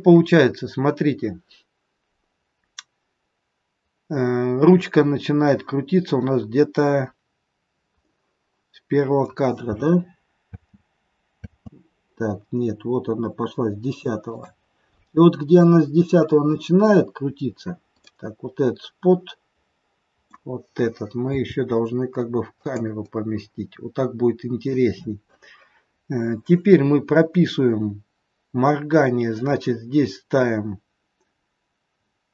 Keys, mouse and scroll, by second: 7.2-7.8 scroll up 3, 7.9 middle click, 10.0 scroll up 2, 10.5 space, 11.5 space, 14.3 click, 18.0 middle click, 21.2 g, 23.0 middle click.